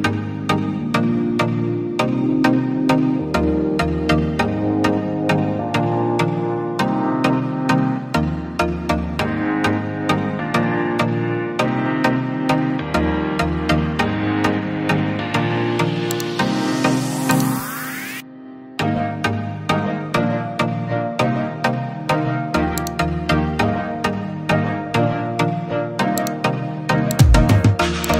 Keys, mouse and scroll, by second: 1.3 right click, 12.9 Return.